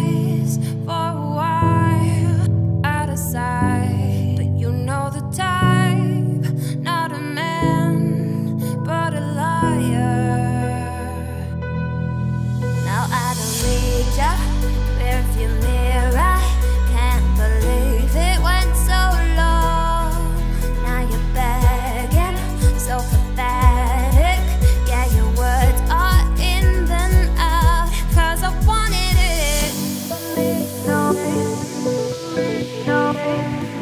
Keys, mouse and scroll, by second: 2.2 x, 2.4 click, 7.9-9.1 middle drag, 9.1-11.9 drag, 14.0 z, 15.4 middle click, 17.3 click, 18.2 Tab, 19.0 click, 20.4 scroll down 1, 22.5 click, 23.6-26.1 drag, 26.1 z, 26.3 scroll down 6, 26.7 shift+middle drag, 26.9 z, 27.7 scroll up 3, 28.1 shift+middle drag, 28.3 scroll up 4, 29.8 click, 30.2-30.7 scroll up 2, 33.5-33.8 drag.